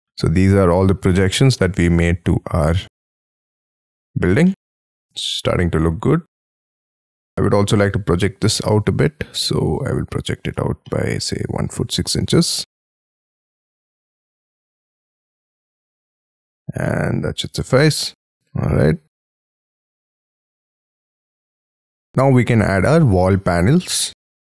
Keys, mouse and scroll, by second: 0.6 scroll up 3, 0.8 p, 1.9 j, 2.8 space, 2.9 Escape, 2.9-3.5 scroll down 7, 3.6 middle click, 4.0-4.4 scroll down 6, 4.4 middle click, 6.2 scroll up 7, 6.4 scroll down 1, 6.7-7.2 scroll up 8, 7.2 middle click, 8.6 double click, 9.4 scroll up 3, 9.6 p, 10.5 space, 10.6-11.0 scroll up 4, 11.0 middle click, 12.3-15.7 typing, 15.9 Escape, 15.9-16.8 scroll down 13, 19.6 middle click, 21.5-22.0 scroll up 5, 22.0 middle click, 22.1 scroll down 7, 23.3 middle click.